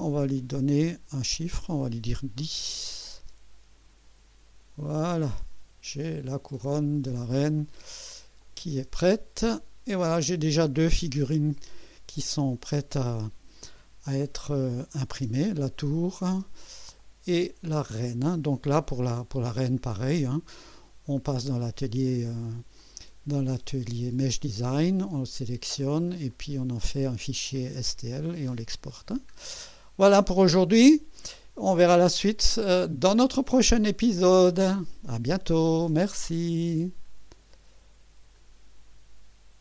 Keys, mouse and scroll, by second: 0.4 click, 1.3 click, 2.2-3.2 typing, 5.3-7.0 drag, 7.1-7.5 scroll down 2, 8.4 click, 8.8 space, 9.3 scroll down 1, 10.0 right click, 14.8 click, 15.1 space, 17.0-18.6 drag, 22.8 click, 26.3 right click, 29.1 scroll down 1, 29.7-31.9 drag, 32.2 scroll down 1, 32.7-33.4 right drag, 33.9-34.4 scroll up 2, 34.7 right click, 36.5 right click.